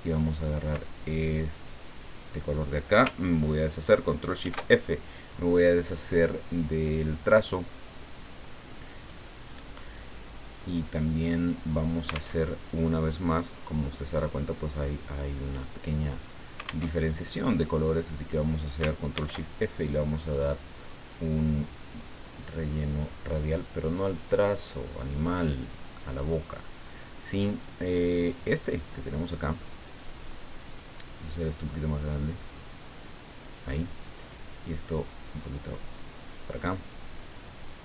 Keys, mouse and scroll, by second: 0.1 ctrl+click, 4.4 ctrl+shift+f, 6.5 click, 7.3 click, 9.0 click, 12.4 alt+Tab, 17.0 alt+Tab, 19.1 ctrl+shift+f, 20.5 click, 21.8 click, 24.1 click, 24.6 click, 25.5 click, 28.2 click, 31.3-34.0 drag, 35.1-37.0 drag.